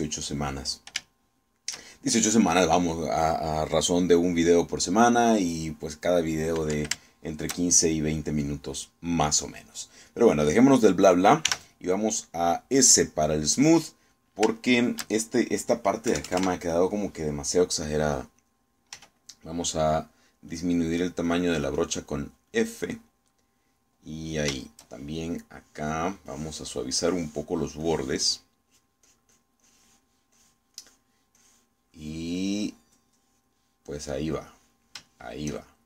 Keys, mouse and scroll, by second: 2.1 shift+middle click, 8.2-9.5 shift+middle drag, 10.8 middle click, 11.0 click, 12.5 s, 15.6 shift+click, 17.2 KP_Add, 20.0 f, 21.0 click, 21.6-23.8 drag, 25.0 middle click, 25.7 shift+middle click, 26.4 click, 27.3 click, 28.0 click, 28.9 click, 29.8 click, 31.4 click, 32.4 click, 33.0 click, 34.2 click, 35.0 click, 35.6 click.